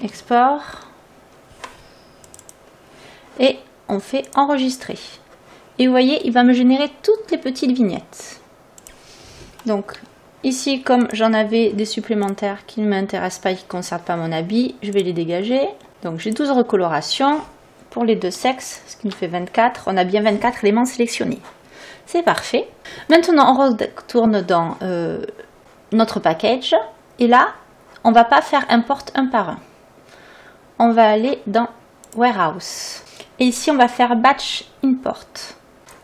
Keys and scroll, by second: 0.0-0.4 typing, 0.8 Return, 10.0 Delete, 13.3 Delete, 13.8 Return, 15.4 Delete, 15.9 Return.